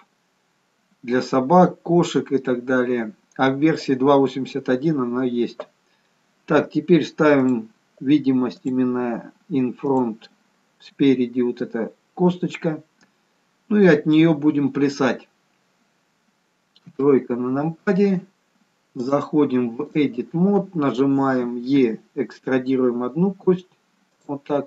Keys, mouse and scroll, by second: 7.5 click, 8.6 click, 11.7-12.6 scroll up 1, 12.6 scroll down 2, 12.9-13.9 scroll down 1, 17.0 KP_3, 19.1 click, 21.7 e.